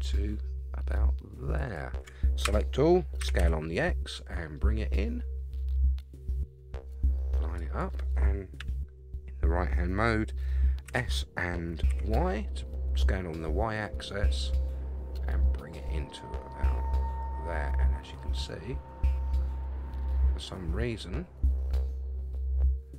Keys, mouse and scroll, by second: 2.4 a, 3.2 s, 8.6 KP_3, 10.9 s.